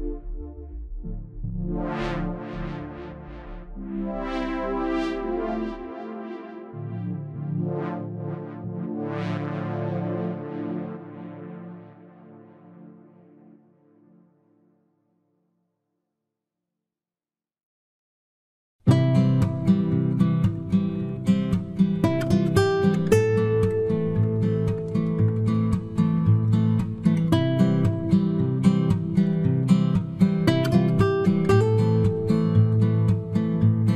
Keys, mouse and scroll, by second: 2.0-5.4 drag, 2.3 c, 3.9 c, 6.5-7.8 right drag, 6.7 ctrl+Tab, 7.8 middle click, 9.6 ctrl+r, 11.9-13.6 right drag, 12.4 b, 13.0 g, 13.7 click, 14.4-17.5 right drag, 15.0 g, 16.0 g, 17.9-19.7 right drag, 18.0 g, 20.3-22.0 right drag, 21.3 g, 23.2-27.8 right drag, 23.4 g, 24.7 g, 26.5 g, 27.9 b, 29.0-30.8 drag, 29.0 middle click, 29.0 right click, 30.2-31.3 right drag, 30.3 g, 33.5 ctrl+Tab.